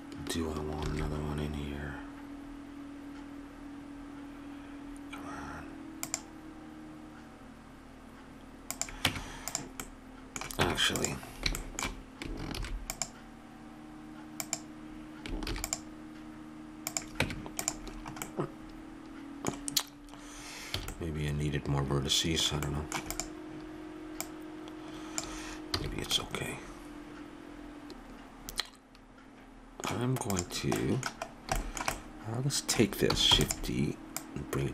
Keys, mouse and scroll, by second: 0.8 ctrl+r, 9.1 Tab, 9.8-11.4 middle drag, 10.6 Tab, 12.5 ctrl+r, 15.5 ctrl+r, 17.2 Tab, 20.8 a, 23.1-26.0 drag, 25.7 a, 26.0 middle click, 27.5 Tab, 27.9 x, 30.3 click, 30.8-32.2 middle drag, 33.3 shift+d, 34.2 click.